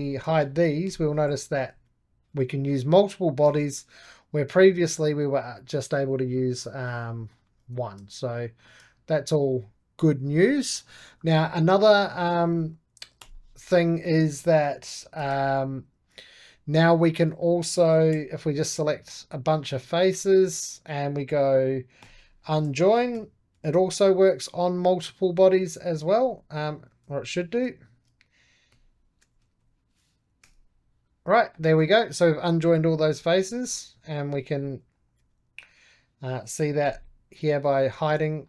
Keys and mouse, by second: 0.8 h, 1.0 middle click, 1.6 4, 2.2 5, 3.3 3, 3.5-10.7 drag, 10.7 ctrl+z, 11.3-13.1 middle drag, 13.1 4, 13.2-15.1 drag, 15.1 shift+d, 15.9-17.3 drag, 17.3 shift+middle click, 18.0 3, 18.4-21.9 drag, 21.9-24.1 typing, 24.8-26.1 drag, 26.1 Escape, 26.6 3, 26.9 4, 27.3-28.6 drag, 28.4-30.0 typing, 30.3 Return, 31.2 middle click, 31.8 right click, 32.6 click, 33.4 3, 33.5-35.1 drag, 35.1 4, 35.5-36.7 drag, 36.7 h, 37.4 click, 37.5 h, 37.9 click, 38.0 h, 38.3 click.